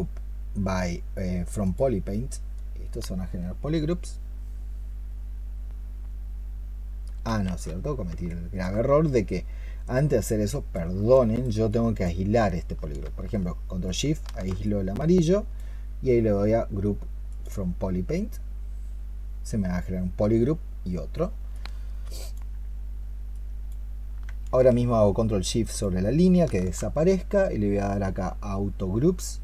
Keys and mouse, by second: 7.8 ctrl+z, 8.1 alt+click, 10.7 alt+click, 11.0 alt+click, 12.1 alt+click, 13.7 ctrl+shift+click, 25.6 ctrl+shift+click.